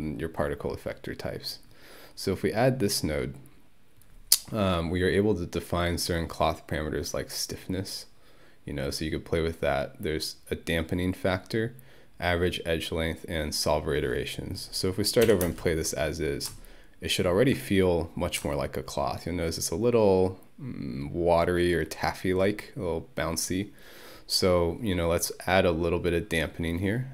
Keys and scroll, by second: 15.3 Home, 15.5 space.